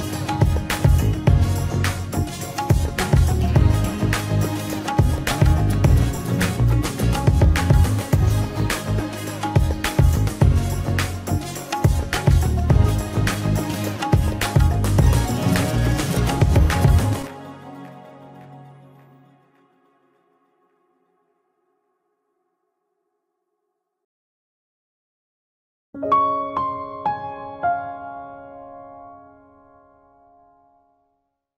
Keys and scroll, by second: 1.4 ctrl+space, 8.9 ctrl+space, 12.6 v, 16.2 Delete, 16.9 ctrl+space, 20.1 alt+shift+space, 22.1 ctrl+space, 22.8 ctrl+space.